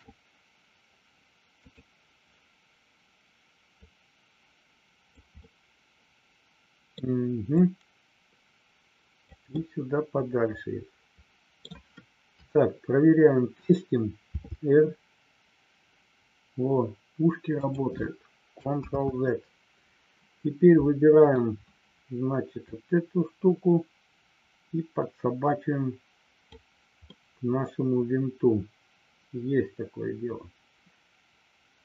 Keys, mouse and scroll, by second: 3.7-5.1 drag, 5.4-7.0 middle drag, 7.6-9.3 drag, 9.4-11.5 middle drag, 12.4 KP_3, 14.3 r, 18.9 ctrl+z, 21.1 click, 22.6-26.6 drag, 27.0-31.8 middle drag.